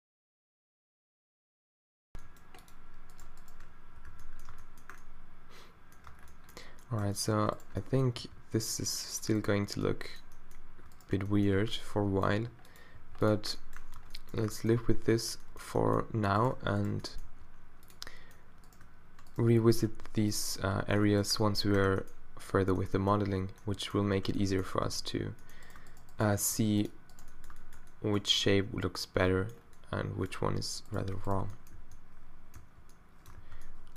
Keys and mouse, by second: 0.6 g, 1.7 click, 2.1 g, 3.8-4.1 q, 4.5 Tab, 6.1 Tab, 8.2 g, 9.2 middle click, 10.1 click, 11.6 q, 12.3 g, 13.0 g, 14.0 Tab, 14.8 Tab, 17.2 g, 19.9 g, 21.1 middle click, 21.7 Tab, 24.9 Tab, 26.0 shift+click, 26.4 g, 30.4 z, 31.8 z, 32.6 f, 33.4 z.